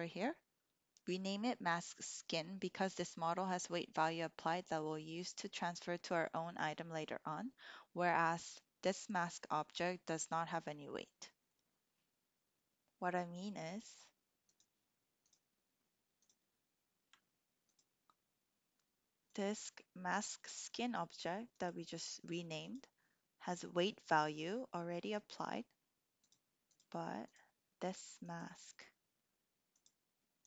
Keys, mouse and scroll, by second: 14.4 shift+click, 15.2-16.4 drag, 17.7 ctrl+click, 19.3-21.7 ctrl+drag, 22.7 ctrl+click, 26.2-26.8 drag, 27.3 drag, 28.3 click, 29.7-30.4 drag.